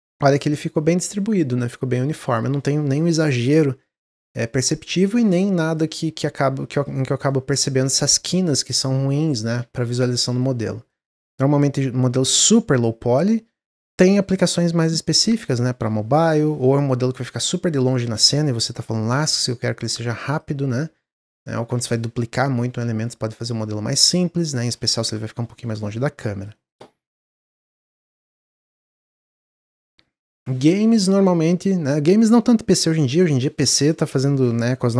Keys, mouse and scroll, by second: 5.6 click, 6.4 Tab, 6.7 click, 7.0 scroll down 3, 7.3-10.4 middle drag, 10.4-10.8 scroll down 1, 10.8-14.0 middle drag, 16.5-17.1 scroll down 10, 17.3-20.1 middle drag, 20.1 click, 21.0-22.1 scroll up 6, 22.7-25.8 middle drag, 25.9 drag, 26.2 click.